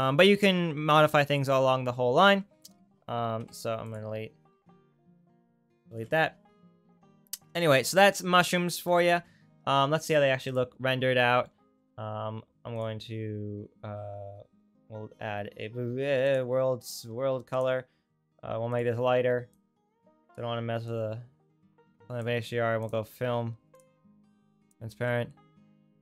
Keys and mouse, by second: 3.3 Delete, 5.7 ctrl+click, 6.2 ctrl+x, 6.2 ctrl+right click, 9.2 Tab, 10.5 click, 10.6-17.5 right drag, 19.7 right click, 19.8-22.8 right drag, 23.8 middle click.